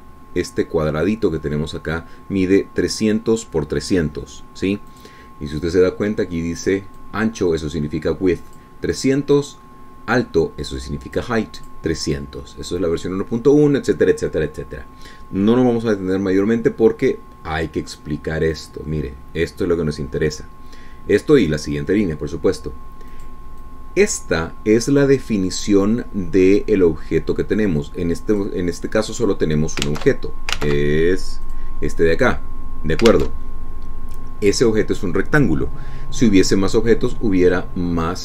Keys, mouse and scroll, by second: 0.3 click, 6.2 click, 8.2-10.0 drag, 10.2 click, 11.7 click, 12.9 click, 19.8-21.8 drag, 24.4 click, 24.9-29.9 drag, 30.4 click, 31.2 alt+Tab, 31.9 alt+Tab, 32.7 click, 34.4 alt+Tab.